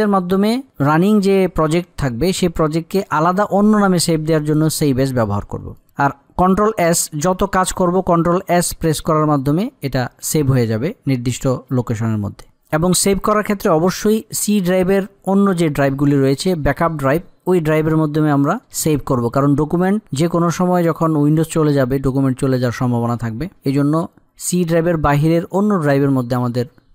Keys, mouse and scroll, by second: 5.4 click.